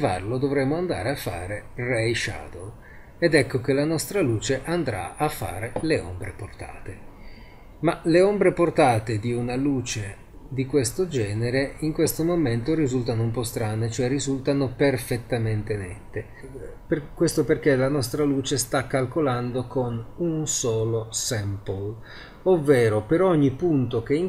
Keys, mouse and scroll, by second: 2.1 click, 3.3-3.8 drag, 3.8-8.7 middle drag, 10.7-15.9 middle drag, 16.7-20.6 middle drag.